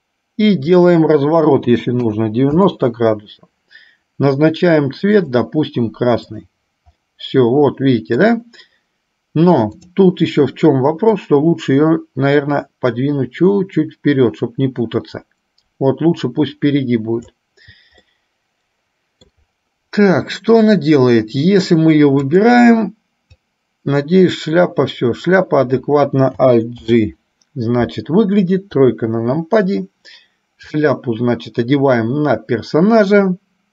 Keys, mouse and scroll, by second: 0.9-3.1 drag, 6.5 click, 7.1-8.5 middle drag, 10.0 click, 11.2-17.5 drag, 18.2-19.5 middle drag, 22.4 click, 23.7-25.6 drag, 27.0 alt+g, 28.9 KP_3, 30.9-33.7 drag.